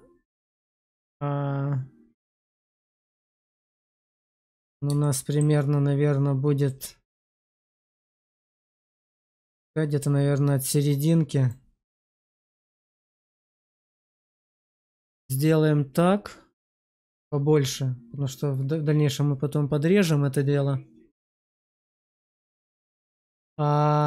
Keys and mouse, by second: 4.9-5.3 shift+middle drag, 11.5 drag.